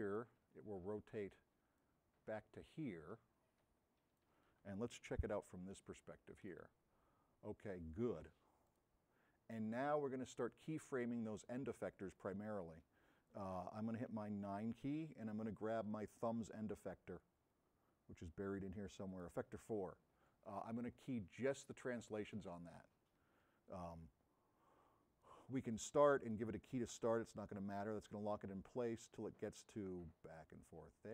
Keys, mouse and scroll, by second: 5.3 s, 8.8 click, 17.5 middle click, 23.6-25.3 drag, 26.3 click.